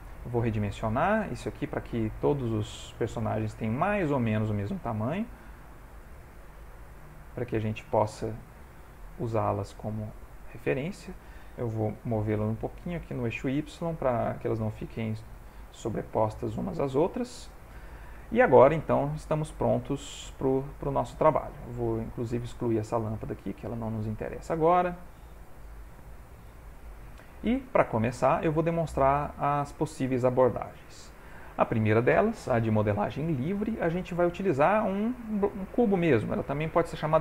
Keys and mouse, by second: 0.3 click, 0.8 s, 1.8 g, 4.1 click, 4.3 g, 5.6 s, 6.4 g, 7.6-9.2 shift+middle click, 8.5 middle click, 8.6-9.1 middle click, 9.0 middle click, 10.3 click, 10.8 middle click, 12.1 g, 13.6 click, 14.5 g, 15.6 middle click, 17.4 shift+middle click, 17.9 ctrl+middle click, 18.3 shift+middle click, 19.2 shift+middle click, 19.8 click, 22.0 click, 22.8 x, 24.0 click, 25.7 g, 27.8 ctrl+middle click, 28.0 middle click, 29.3 shift+middle click, 30.2 ctrl+middle click, 30.5 shift+middle click, 30.8 middle click, 34.0 click, 34.4 g.